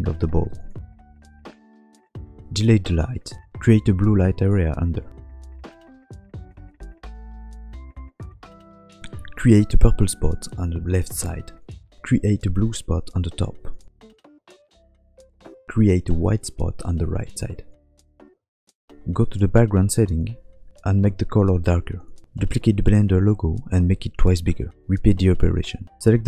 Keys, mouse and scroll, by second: 0.5 click, 0.5 scroll up 1, 0.8 click, 2.0 scroll down 4, 2.3 shift+middle click, 2.5 click, 3.1 Delete, 19.1 middle click, 19.9 click.